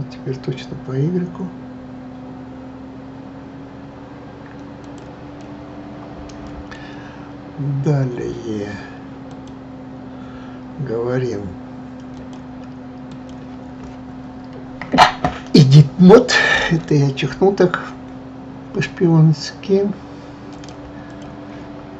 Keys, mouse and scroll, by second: 5.4-7.3 middle drag, 7.3-8.2 scroll up 1, 9.3 click, 12.1-15.2 drag, 20.5 click, 21.1 click.